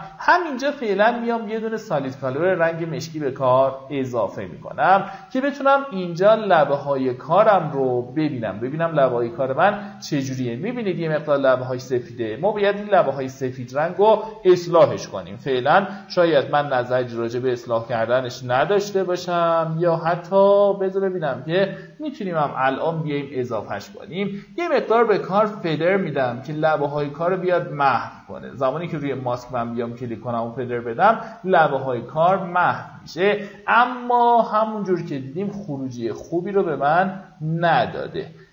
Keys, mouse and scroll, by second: 5.2-5.6 alt+scroll down 1, 6.3 alt+scroll up 1, 6.9 alt+scroll up 1, 7.7 click, 9.0-9.5 alt+scroll up 2, 10.0-10.6 alt+scroll up 1, 11.0-11.3 alt+scroll down 1, 12.6-13.0 alt+scroll down 1, 13.3 alt+scroll down 1, 14.5-14.8 alt+scroll up 1, 16.5-33.0 drag, 34.0 space, 34.2-38.5 drag.